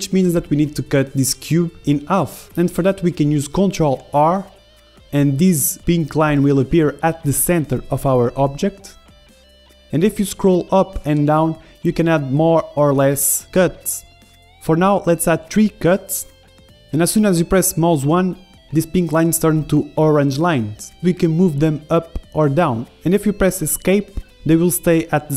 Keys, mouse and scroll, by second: 2.0 KP_1, 2.7-4.4 drag, 4.4 ctrl+r, 6.7 ctrl+r, 7.3-9.4 middle drag, 8.4 ctrl+r, 21.8 Escape, 22.8-24.4 a, 23.9-25.3 middle drag, 25.0 KP_1.